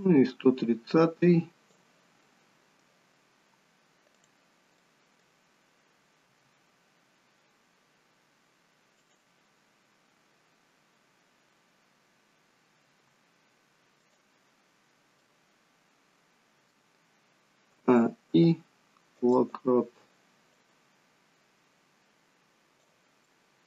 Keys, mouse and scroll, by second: 0.1 click, 2.2 middle click, 4.1 click, 4.7 middle click, 6.2 g, 12.8 g, 14.8-15.2 scroll down 1, 15.2 middle click, 17.7 a, 18.2 i, 20.7 click, 23.2 middle click.